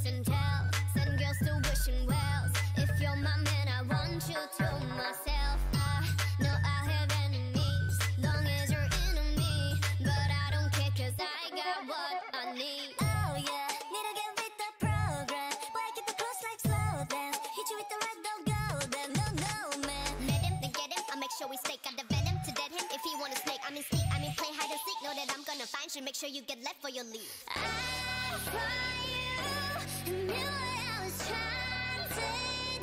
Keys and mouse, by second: 1.3 g, 2.4 click, 3.1 g, 5.4-7.7 drag, 6.6 g, 8.1 click, 8.3 g, 9.4 ctrl+r, 10.4 g, 11.9 g, 12.8 a, 13.9-15.2 drag, 14.2-20.2 typing, 19.1-21.0 drag, 21.2 a, 22.5 click, 23.7 g, 24.3 a, 24.8 Tab, 26.1-27.8 drag, 29.9 Tab, 30.8 ctrl+Tab, 31.8-32.8 drag.